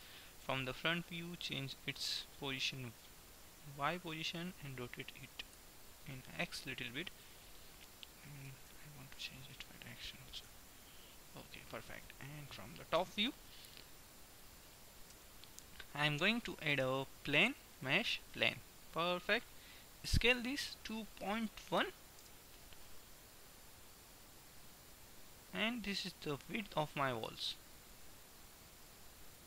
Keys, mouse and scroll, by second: 0.6 KP_1, 2.0-3.8 drag, 5.6 r, 8.6 g, 10.6 KP_1, 13.1 KP_7, 15.1 KP_7, 17.0 shift+a, 20.1 s.